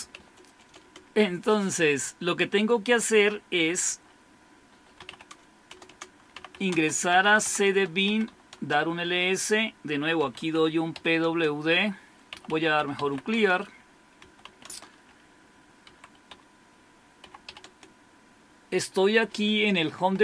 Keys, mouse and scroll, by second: 0.0-0.6 typing, 4.7-8.5 typing, 9.9-15.9 typing, 17.0-18.2 typing.